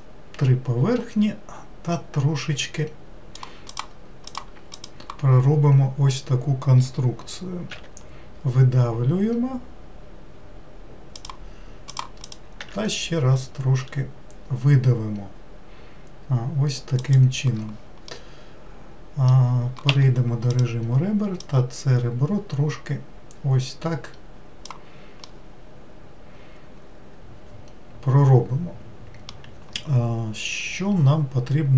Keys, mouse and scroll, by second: 3.7 click, 4.2 click, 4.7 shift+click, 7.7 e, 11.9 click, 12.2 click, 12.6 e, 18.1-19.9 middle drag, 19.9 2, 20.5 click, 21.4-24.4 drag, 25.2-28.4 middle drag.